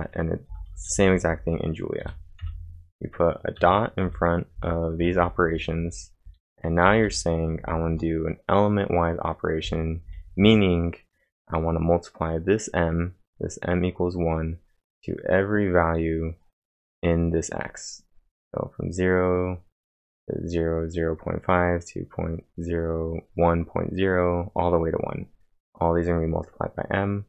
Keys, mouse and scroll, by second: 0.0-7.8 typing, 9.6-10.9 typing.